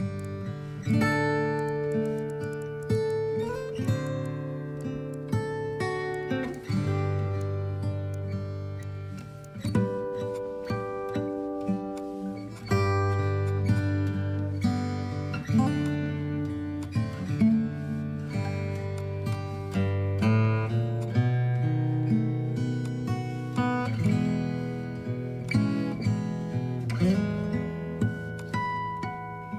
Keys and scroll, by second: 0.4 KP_5.